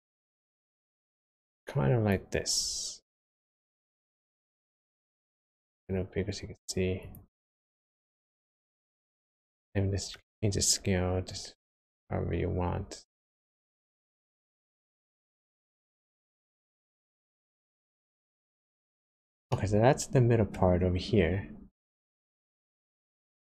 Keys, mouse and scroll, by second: 4.1 s, 7.9-9.4 scroll down 2, 9.4 middle click, 10.2-10.6 scroll up 1, 10.6-11.1 scroll down 1, 11.2 click, 19.4 middle click, 22.3 middle click.